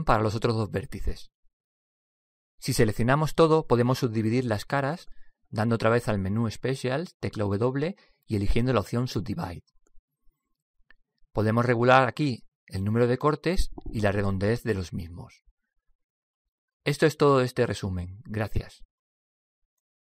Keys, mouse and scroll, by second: 1.5 alt+m, 3.0-4.8 middle drag, 4.2 a, 4.6 a, 6.0-7.8 middle drag, 7.8 w, 12.6-15.7 drag, 16.7-18.7 middle drag.